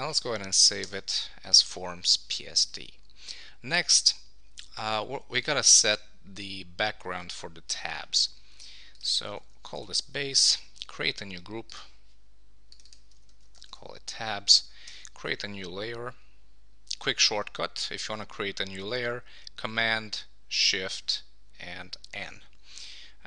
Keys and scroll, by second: 9.7 Return, 13.6 Return.